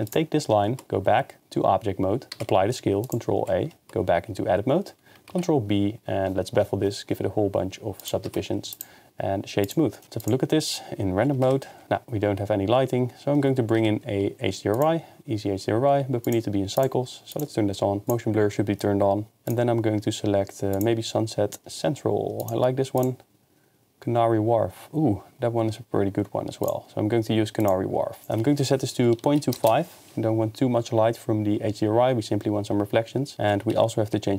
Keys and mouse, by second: 0.7 Tab, 0.8 ctrl+a, 2.3 ctrl+a, 3.7 Tab, 5.3 ctrl+b, 8.0 click, 8.3 Tab, 8.7-9.7 drag, 10.0 KP_0, 11.6 click, 11.8 ctrl+s, 13.8 n, 14.7 click, 16.3 click, 16.9-18.2 drag, 19.5-20.8 drag, 22.5 click, 26.6 click, 28.2-29.6 drag, 33.8 ctrl+s.